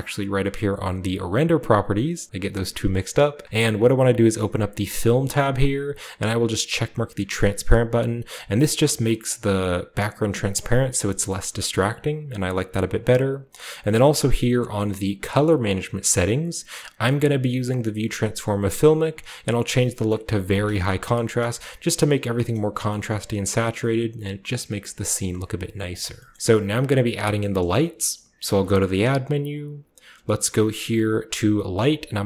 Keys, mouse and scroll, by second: 1.2 click, 4.9 click, 5.6-6.6 scroll down 1, 7.6 click, 8.5 click, 9.0-9.9 scroll down 2, 11.8-12.9 scroll up 2, 12.9-13.7 scroll down 2, 14.3-14.8 drag, 19.0 click, 20.4 click, 21.3-22.6 scroll down 1, 22.5-22.8 middle drag, 22.6-25.0 scroll up 1, 23.7-25.0 middle drag, 25.0-25.8 scroll down 1, 25.8 shift+click, 26.0-27.1 shift+scroll down 1, 27.1-28.3 scroll down 1, 27.3 middle click, 28.4 shift+a.